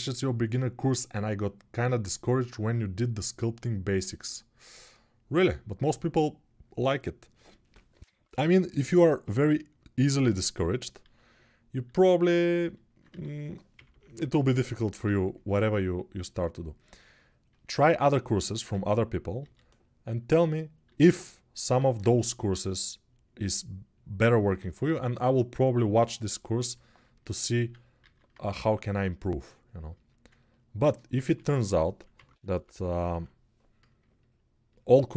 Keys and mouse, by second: 10.8 alt+q, 11.8 alt+q, 12.8-14.7 typing, 18.1 g, 18.5 f, 20.0-22.4 alt+middle drag, 20.7 alt+q, 21.7 alt+q, 22.4-35.1 drag, 27.2 alt+q, 27.9 alt+q, 31.0-32.8 typing.